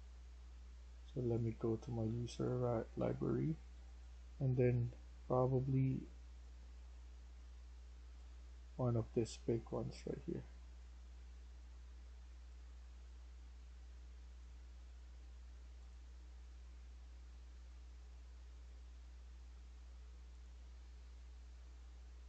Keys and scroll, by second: 1.7-4.6 typing, 8.5 s, 9.6-10.4 a, 10.4-11.0 s, 11.0 d, 14.2 s, 14.8 s, 14.9 s.